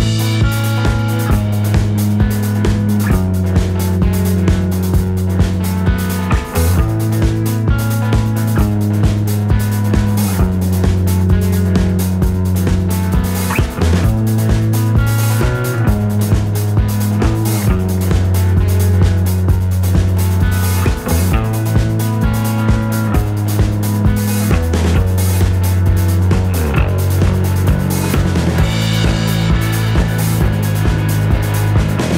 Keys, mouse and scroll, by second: 0.8 click, 1.6-2.1 middle drag, 2.4 middle click, 3.1-5.1 drag, 7.9 click, 9.3 KP_Add, 10.2 click, 11.5 click, 13.3 scroll up 1, 13.9 scroll up 1, 16.9 click, 18.2 ctrl+z, 18.8-23.1 ctrl+shift+drag, 23.8 click, 25.9-29.9 shift+drag, 31.0 click.